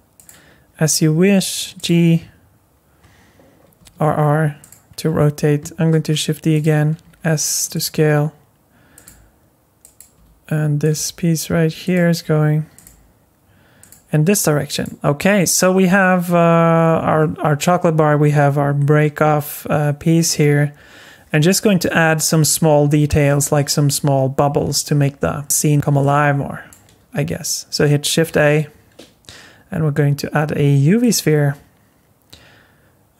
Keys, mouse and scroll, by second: 1.0 g, 3.8 r, 5.9 shift+d, 7.0 s, 7.9 r, 9.0 g, 10.1 r, 10.9 g, 12.2 r, 12.8 g, 14.7 click, 14.9 scroll down 3, 15.5-16.3 scroll down 2, 16.3 scroll up 2, 16.7-18.7 scroll down 3, 20.7-23.1 scroll down 1, 23.1-23.5 scroll down 1, 23.5-24.8 scroll up 1, 24.8 scroll down 5, 25.7 scroll down 2, 26.0 middle click, 31.2 shift+a.